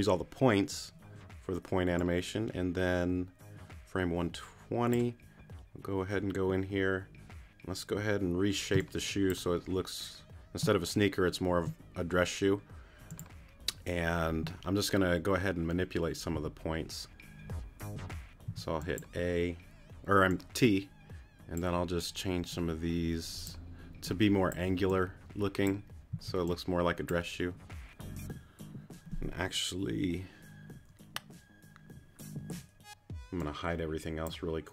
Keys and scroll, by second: 8.7 space, 16.3 t, 18.5 t, 26.1 c.